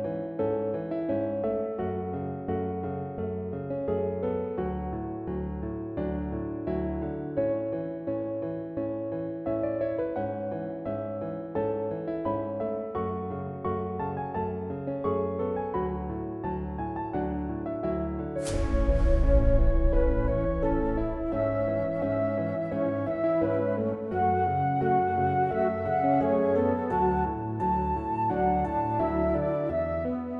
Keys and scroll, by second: 2.1-3.0 typing, 3.1 Return, 4.9 typing, 19.9 1, 23.8-25.5 typing, 26.3 Return.